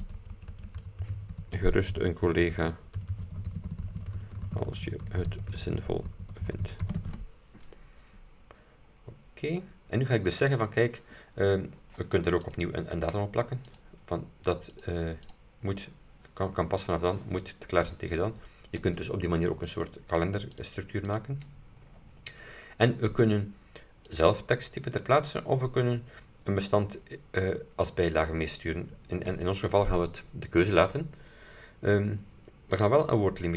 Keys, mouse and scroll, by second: 0.0-7.6 typing, 8.9-9.3 scroll down 2, 9.4 scroll up 2, 9.7-10.5 scroll down 4, 12.6 click, 13.8 click, 14.8 click, 15.3 click, 20.6 click, 21.2 click, 21.9-22.3 scroll down 2, 24.2 click, 32.8 click.